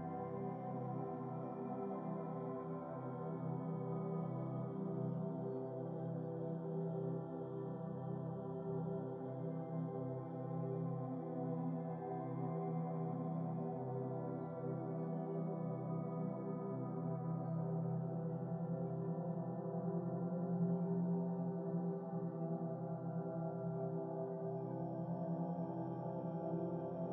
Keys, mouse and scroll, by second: 2.6-3.9 drag, 5.2-6.8 drag, 8.7 shift+click, 9.2-10.9 drag, 12.4-12.9 shift+middle drag, 12.9-13.3 scroll up 1, 13.3 shift+middle click, 13.8 click, 15.5-17.0 drag, 17.2-18.8 drag, 19.9-20.8 drag, 21.4-22.9 drag, 24.0 Tab, 24.6 scroll down 3, 25.0-26.8 middle drag, 26.8-27.1 scroll down 3, 27.0-27.1 middle drag.